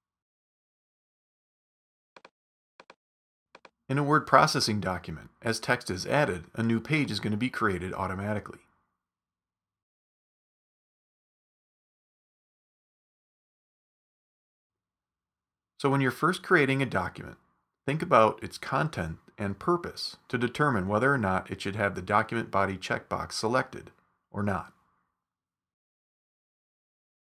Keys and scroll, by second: 8.1 Return, 9.4 super+z, 9.7 super+v, 12.1 super+v, 15.0 super+z.